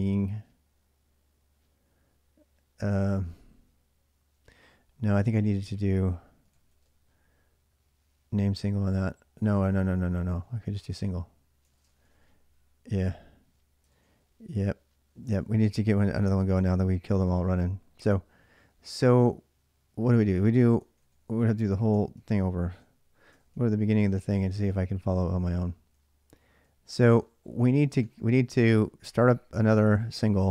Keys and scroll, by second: 3.9-7.0 typing, 9.4-12.3 typing, 13.7 ctrl+a, 13.8 ctrl+a, 14.8-15.8 typing, 20.7 ctrl+a, 20.8 ctrl+a, 21.8 ctrl+[, 21.9-26.4 typing.